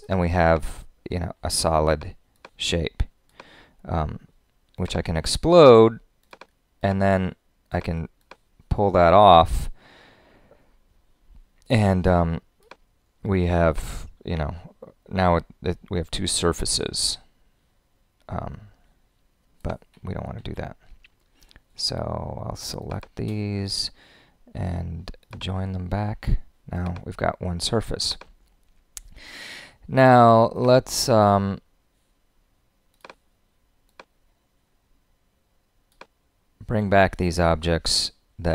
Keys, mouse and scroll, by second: 20.4 super+z.